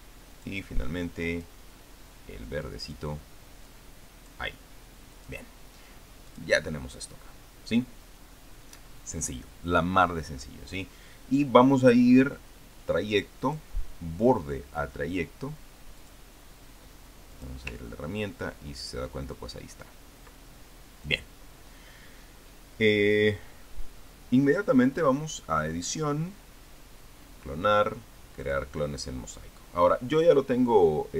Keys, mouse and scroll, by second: 1.1 click, 2.2 click, 3.5 click, 4.5 click, 6.0 click, 7.1 click, 14.2 click, 16.8 click, 18.1 click, 18.5-19.4 ctrl+scroll up 1, 19.9-20.3 ctrl+scroll down 2, 20.4 ctrl+scroll up 2, 21.9 click, 26.1 click, 29.2 click.